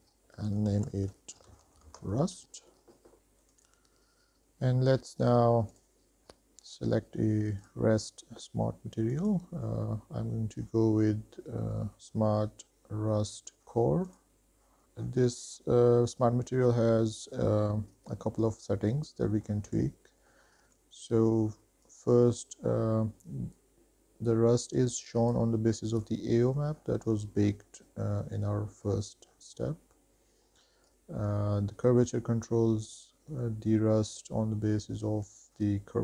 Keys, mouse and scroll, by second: 3.2 click, 3.2 scroll down 1, 3.7 click, 6.0 click, 6.4-7.8 scroll down 5, 7.8-8.2 drag, 9.3-14.5 drag, 14.8 shift+middle click, 14.8-15.7 scroll down 4, 19.2-19.5 middle drag, 19.7 shift+middle drag, 20.3 middle click, 20.7 shift+middle click, 22.0-25.6 drag, 27.0-29.1 scroll up 6, 29.1 scroll down 1, 29.2-30.8 scroll down 3, 31.1-36.0 drag.